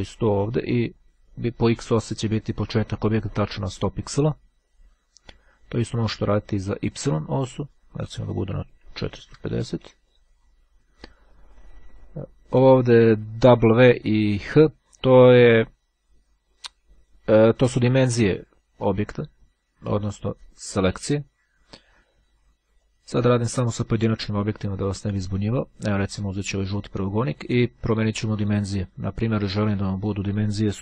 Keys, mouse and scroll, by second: 6.0-7.2 drag, 7.4 KP_4, 22.9-24.1 drag, 26.3-27.5 drag, 29.7 click.